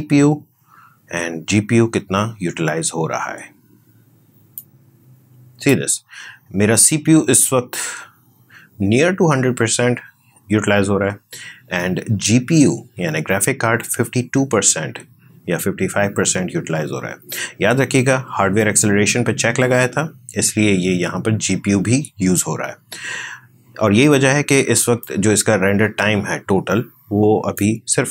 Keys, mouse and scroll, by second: 4.5-8.1 drag, 24.9-28.1 drag.